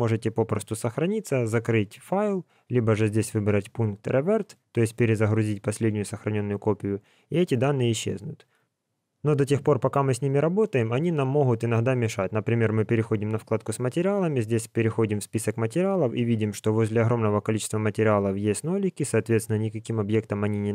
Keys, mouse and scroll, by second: 3.1 click, 9.9 click, 12.7 click.